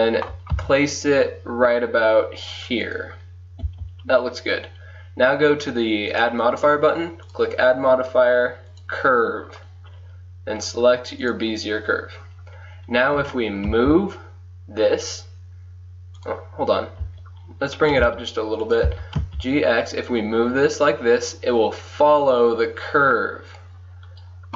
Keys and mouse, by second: 0.7 g, 3.8 click, 6.1-7.1 drag, 9.1 click, 10.8-12.6 drag, 13.3 g, 17.1 g, 18.9 g.